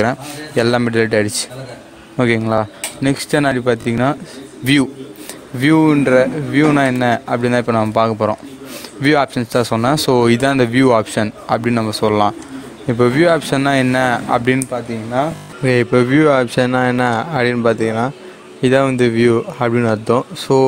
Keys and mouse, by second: 6.8 right click, 12.3 click, 17.0 click.